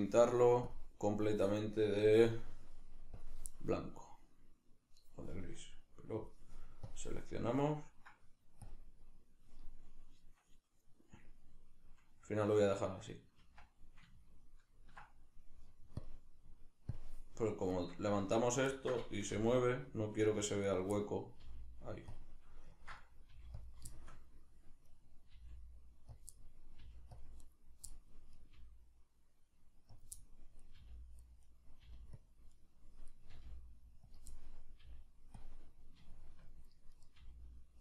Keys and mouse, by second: 3.1-6.9 drag, 8.7-9.5 drag, 11.4-16.0 middle drag, 13.4 Tab, 16.0-17.8 drag, 17.8 right click, 18.2 Tab, 18.8-20.8 ctrl+middle drag, 19.3 g, 20.8 right click, 21.0-22.2 middle drag, 21.4 g, 22.2 click, 22.3-23.7 middle drag, 23.3 g, 23.7 click, 23.9-25.0 shift+middle drag, 25.0 right click, 25.4 g, 26.2 click, 26.4 middle click, 26.8 g, 27.2 click, 27.5 right click, 27.9 middle click, 28.4 right click, 28.6 g, 30.0 click, 30.2 middle click, 30.7 right click, 30.8 g, 31.5 right click, 31.8 g, 32.3 click, 32.6 right click, 33.1 right click, 33.3 g, 34.1 click, 34.3-35.4 middle drag, 34.8 g, 35.4 click, 35.5-37.0 middle drag, 37.0 right click, 37.1 g.